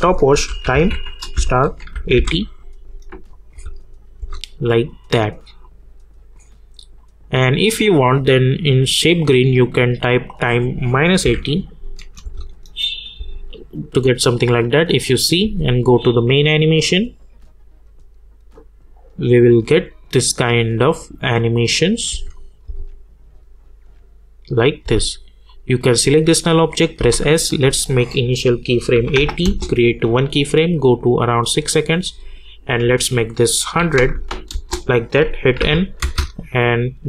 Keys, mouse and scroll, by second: 0.1-3.5 typing, 3.3 click, 4.7-7.0 drag, 11.7 click, 12.2 space, 13.8 click, 15.4 space, 22.1 space, 22.3 click, 22.6 space, 24.8 space, 25.4 click, 27.0 s, 27.8 click, 29.4 Return, 30.2-33.6 drag, 34.5 Return, 35.6 n, 36.0 space.